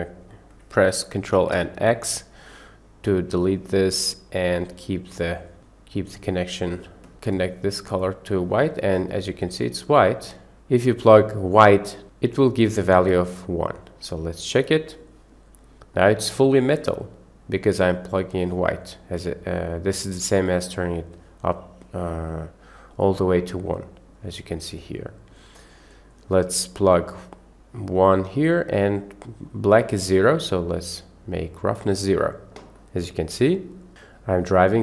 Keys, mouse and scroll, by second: 1.6 ctrl+x, 3.1 click, 4.0 click, 4.2 click, 5.1 drag, 6.2 click, 7.3-7.9 drag, 10.3 click, 11.4-12.0 drag, 13.9-15.0 drag, 15.9-16.7 middle drag, 17.7 drag, 17.9 drag, 18.4 click, 20.1 click, 21.2 click, 22.9-24.1 drag, 25.0-25.4 drag, 25.9 drag, 26.9-27.8 drag, 29.4-31.8 drag, 32.8 middle drag, 32.9-33.7 drag, 32.9-33.7 right drag, 33.7 middle click, 33.8 drag, 33.8 right drag, 34.4 click, 34.4 right click.